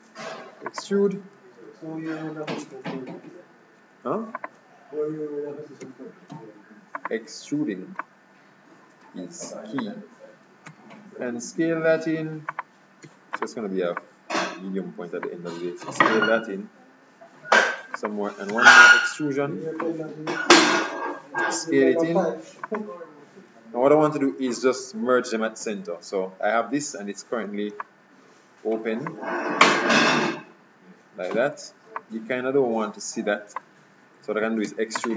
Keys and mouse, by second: 2.8 s, 5.9 e, 8.1-9.8 drag, 10.7 s, 13.2 e, 14.1-15.8 drag, 15.9 s, 18.6 e, 20.0-21.5 drag, 21.5 s, 25.7 KP_Decimal, 27.9-29.8 middle drag, 31.9-34.8 middle drag, 34.8 e.